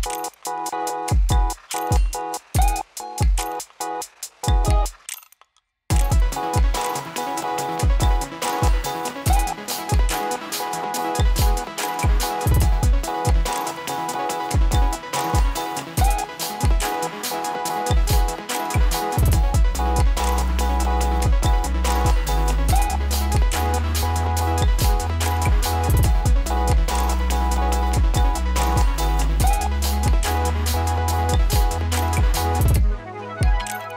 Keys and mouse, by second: 0.9 click, 5.0 ctrl+shift+n, 10.0 Return, 11.4 click, 13.0 space, 16.1 space, 16.7-19.8 drag, 24.4 space, 25.3 [, 25.7 space, 29.4-33.9 drag.